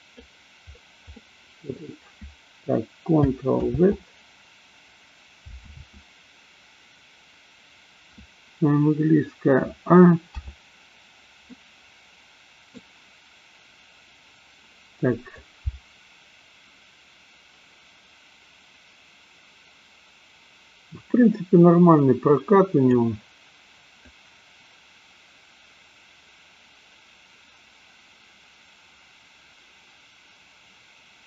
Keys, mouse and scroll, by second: 1.1 middle click, 4.1 ctrl+z, 10.5 a, 11.5-12.9 middle drag, 15.6-23.2 drag, 24.4-31.2 drag.